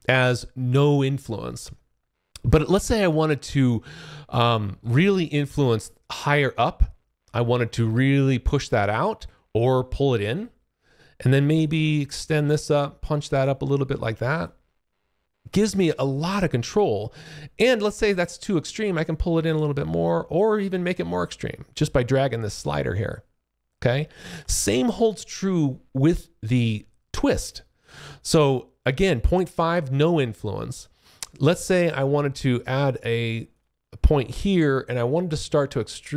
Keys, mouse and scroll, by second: 5.8 click, 14.8 alt+click, 18.2 click, 25.5 alt+click, 26.7-27.7 scroll down 11, 27.7 click, 34.4 click.